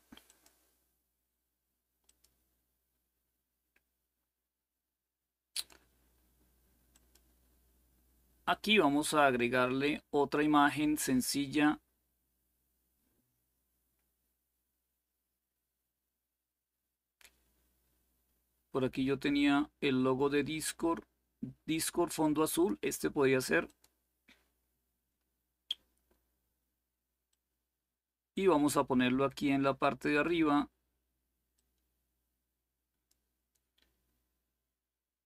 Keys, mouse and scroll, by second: 0.0 click, 1.8 click, 5.3 click, 6.7 click, 7.3 click, 9.6-11.0 scroll down 2, 11.0-12.8 scroll down 1, 12.8-13.7 scroll down 1, 13.7-15.0 scroll down 1, 15.0-18.5 scroll down 1, 18.8-21.2 scroll down 2, 22.2 click, 23.4 click, 27.0-30.8 drag, 31.3-32.9 drag.